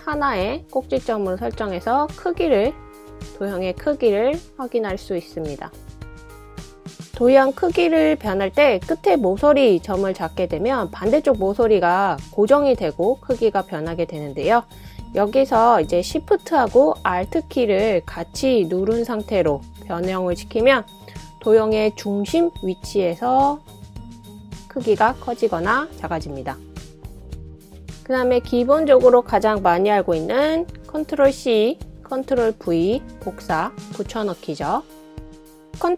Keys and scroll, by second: 31.3 ctrl+c, 31.3 ctrl+v, 32.4 super+c, 33.6 super+v, 35.4 super+v.